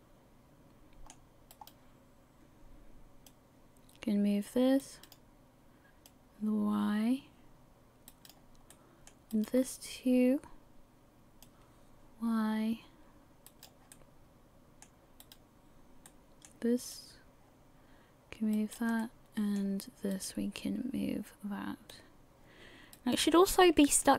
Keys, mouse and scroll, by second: 2.4 right click, 2.4-3.3 scroll up 1, 3.3 click, 6.1 click, 8.7 middle click, 10.1 right click, 11.4 click, 13.9 middle click, 15.8 right click, 16.1 middle click, 16.9 click, 19.0 middle click, 21.0 right click, 21.9 click, 23.5 middle click.